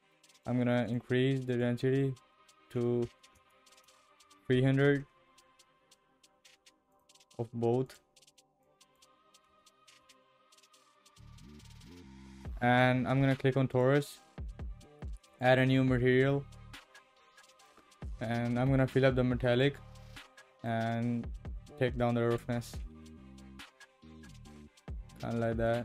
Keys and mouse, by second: 0.8-4.8 drag, 7.9-9.9 drag, 13.7 click, 15.3 click, 18.3-19.6 drag, 20.8-22.4 drag, 25.7 click.